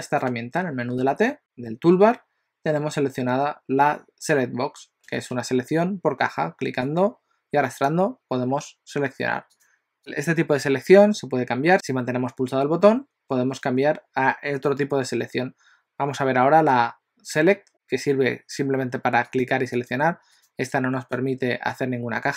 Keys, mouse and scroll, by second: 1.1 t, 1.4 click, 1.4 t, 7.0 click, 9.7 click, 19.3 click, 19.8 click, 20.7 click, 20.9 click, 22.0 click.